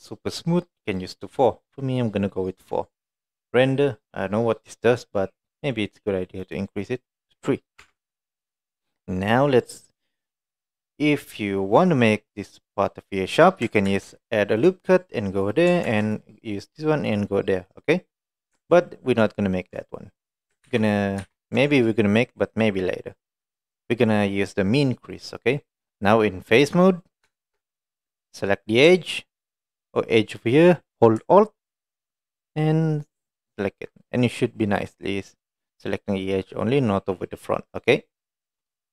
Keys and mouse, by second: 7.5 middle drag, 7.9 Tab, 8.1 middle click, 8.9 middle click, 11.4 middle click, 13.9 ctrl+r, 15.9 ctrl+r, 17.6 middle click, 19.4 ctrl+middle click, 20.3 middle click, 20.7 ctrl+z, 21.9 middle click, 22.6 middle click, 25.3 middle click, 27.3 shift+middle click, 34.1 middle click, 34.7 middle click, 35.6 middle click, 36.7 middle click, 37.8 middle click.